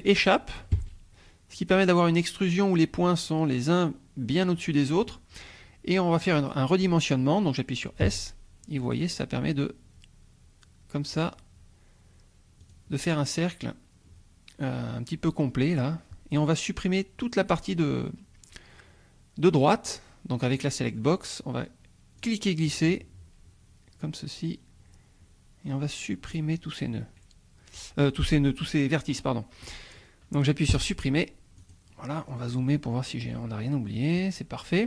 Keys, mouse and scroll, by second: 0.8 Escape, 8.0 s, 12.6 click, 13.2-18.9 scroll down 2, 18.9-20.6 scroll down 1, 20.6 click, 22.2-26.5 drag, 30.7 Delete, 31.6 click, 32.2-33.1 scroll up 1, 33.1 scroll up 1, 33.7 scroll up 1, 34.5-34.8 scroll down 1.